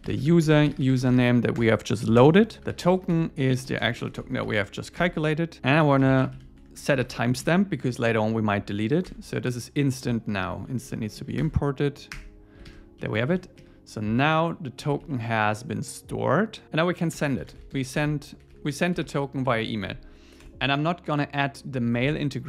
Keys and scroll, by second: 1.6 Return, 5.0 Escape, 5.6 Return, 7.4 Return, 9.1 Tab, 11.4 alt+Return, 12.2 Return, 12.6 super+s, 13.0 Down, 13.6 Up, 15.0 super+Right, 16.6 Return, 19.9 Escape, 21.5 Right, 21.8 ⟲.